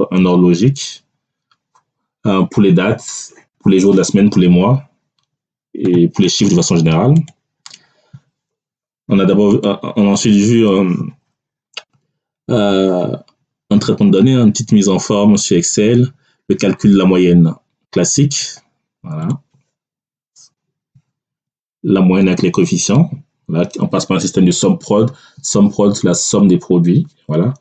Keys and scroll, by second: 21.3 Tab.